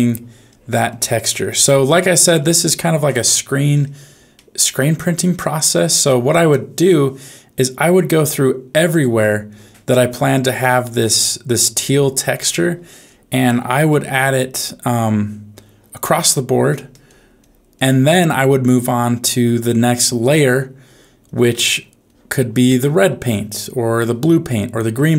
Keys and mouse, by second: 0.1 click, 0.5 click, 0.8 click, 1.2 click, 1.5 click, 1.9 click, 2.3 click, 4.3 shift+middle click, 5.7 shift+middle click, 7.8 click, 8.3 click, 8.7 click, 9.2 click, 9.5 click, 10.1 click, 10.5 click, 10.8 click, 11.1 click, 11.5 click, 11.7 click, 12.0 click, 12.3 click, 12.6 click, 13.0 click, 13.8 f, 14.6 click, 15.0 click, 15.5 click, 16.1 click, 16.7 click, 17.0 click, 17.3 click, 17.7 click, 18.1 click, 18.5 click, 18.7 click, 19.1 click, 19.6 click, 20.0 click, 20.4 click, 20.8 click, 21.2 click, 21.6 click, 22.0 click, 22.4 click, 22.7 click, 23.0 click, 23.5 click, 24.0 click, 24.4 click, 24.8 click.